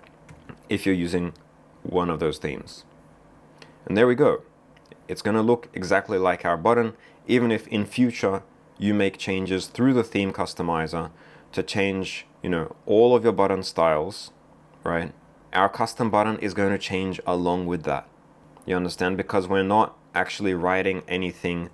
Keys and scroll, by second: 0.3 super+v.